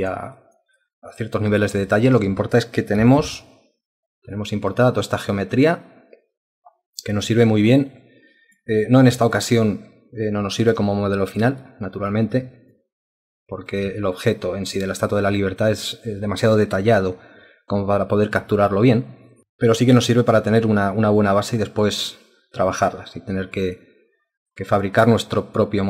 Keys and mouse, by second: 0.4 alt+click, 0.8 alt+click, 1.9 ctrl+alt+click, 3.2 ctrl+1, 3.8 alt+click, 4.7 alt+click, 7.2 alt+click, 9.2 alt+click, 11.6 alt+click, 12.8 ctrl+alt+click, 19.4 alt+click, 20.6 alt+click, 21.1 alt+click, 22.1 alt+click, 24.5 alt+click, 25.1 alt+click.